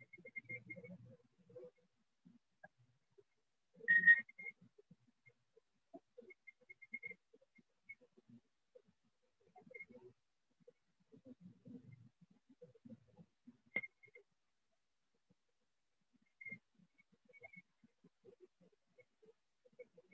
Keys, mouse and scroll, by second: 0.5 alt+click, 1.5 click, 3.5 click, 4.5-5.5 click, 4.5 ], 5.5 ], 6.5 click, 7.5 click, 8.5 click, 9.5 click, 9.5 ], 10.5 click, 10.5 ], 11.5 click, 12.5 click, 13.5 click, 14.5 shift+click, 16.5 alt+click, 17.5 click, 18.5 click, 19.5 alt+click.